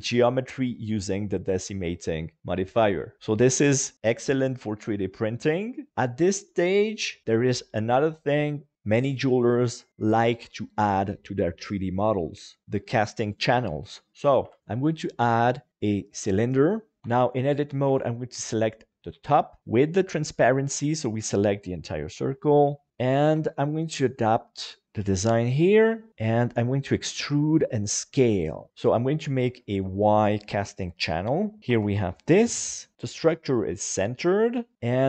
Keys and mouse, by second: 14.4 KP_1, 15.0-16.1 drag, 17.0 Tab, 17.6 alt+z, 17.9 alt+a, 18.3 b, 20.3-21.3 middle drag, 22.1 KP_1, 23.4 a, 24.0 click, 24.8 alt+a, 24.8 click, 24.8 b, 26.1 e, 26.2 click, 26.9 s, 27.9 click, 28.2 g, 29.5 shift+middle click, 31.4 middle click, 31.7 Tab, 33.0 KP_7, 34.0 middle click, 34.7-35.0 drag.